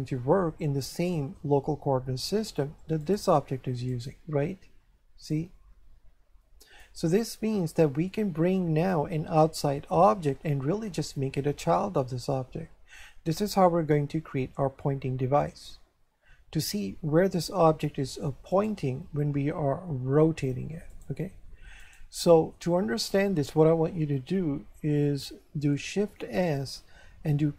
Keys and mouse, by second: 3.0 right click, 5.3 click, 7.3 click, 18.5 right click, 19.9 r, 20.9 right click, 26.3 shift+s.